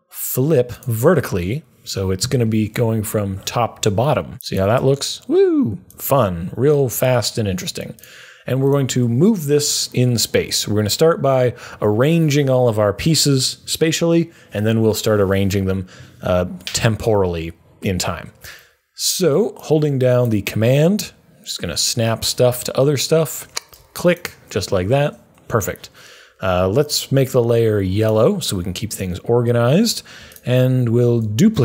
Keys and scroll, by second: 31.0 super+d.